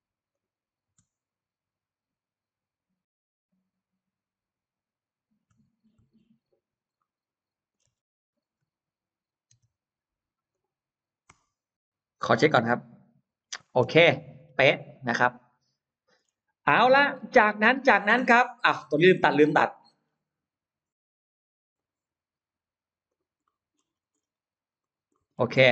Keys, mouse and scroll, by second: 0.2 click, 6.1 ctrl+z, 6.8 middle click, 7.7 space, 8.4-8.7 scroll up 1, 9.5 l, 10.3 click, 13.5-13.9 scroll down 1, 13.8 space, 14.0 middle click, 14.2 space, 14.4 scroll up 1, 14.9-16.0 middle drag, 16.6 scroll down 1, 17.0 middle click, 17.0 scroll up 1, 17.6-17.9 scroll down 1, 18.4-19.5 scroll up 2, 19.5 middle click, 19.9-20.2 scroll down 1, 21.6 click, 22.3-22.9 scroll up 1, 22.9 click, 23.2-24.7 scroll up 3, 23.4 middle click, 24.7 click, 24.9 middle click, 25.1-25.7 scroll down 2.